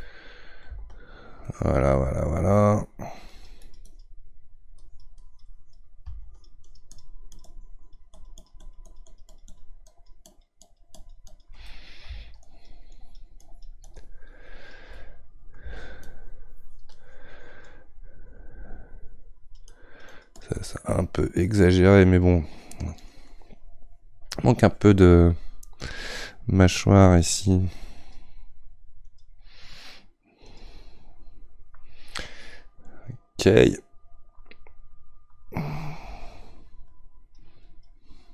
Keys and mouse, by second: 0.0-3.3 middle drag, 3.3-11.6 drag, 11.6 middle click, 12.4-14.9 shift+drag, 14.9-16.0 middle drag, 16.0-20.6 shift+drag, 20.6-25.9 middle drag, 25.9-32.2 drag, 32.2-35.2 middle drag, 36.9-38.3 drag.